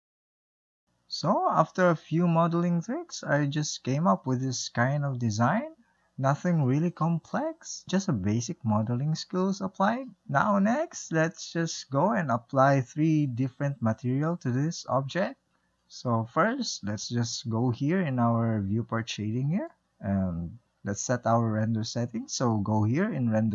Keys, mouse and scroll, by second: 0.3 click, 1.7-7.5 middle drag, 7.5-8.0 scroll up 1, 8.0-11.0 shift+middle drag, 12.4-15.4 middle drag, 15.5-17.9 middle drag, 19.1 click, 22.3 click.